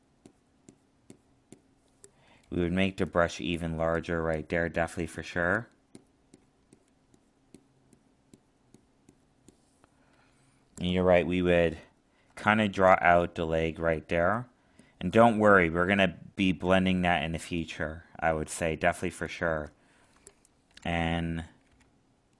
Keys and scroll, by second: 11.1 alt+space.